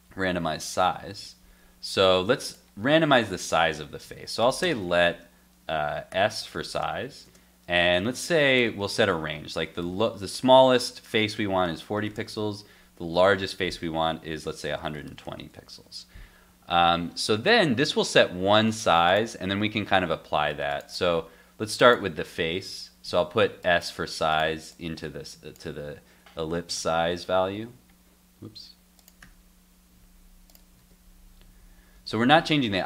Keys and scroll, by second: 0.5 super+Tab, 1.2 super+s, 4.0 super+s, 15.4 super+s, 22.5 super+s, 23.1 super+s, 26.8 super+s, 27.1 super+Tab, 27.6 super+r, 30.8 super+r, 31.5 super+r, 32.0 super+r.